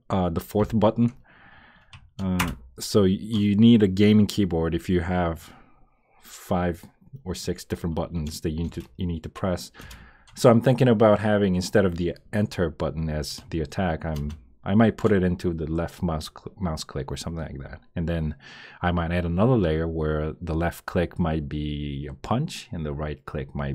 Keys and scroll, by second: 2.4 Return, 8.6 Return, 9.8 Return, 14.1 Return.